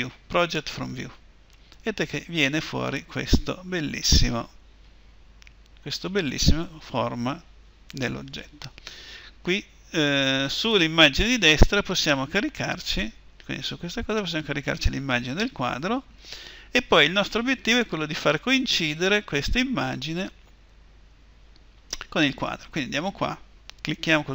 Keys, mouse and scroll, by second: 22.5-24.3 right drag.